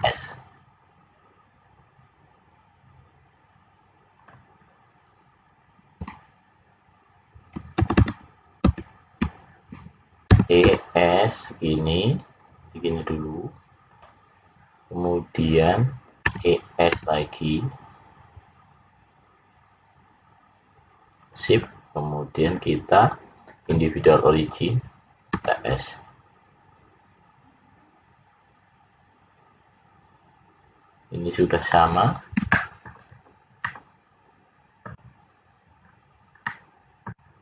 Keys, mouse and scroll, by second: 7.7 ctrl+z, 7.9 ctrl+z, 8.6 ctrl+z, 10.3 e, 16.2 e, 22.4 click, 25.3 s, 32.9 click, 33.5 middle click, 35.8 scroll up 2, 36.4 middle click.